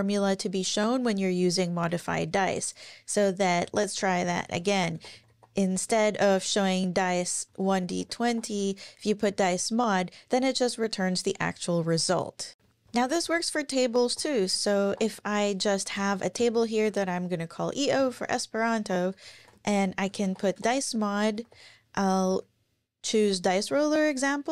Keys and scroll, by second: 1.9 Escape, 3.2 Down, 3.6 shift+super+Right, 3.9 shift+super+End, 4.9 typing, 7.2-8.7 typing, 9.3 Up, 12.6-15.5 typing, 15.9 Return, 16.4 Return, 18.8-22.8 typing, 22.3 Down.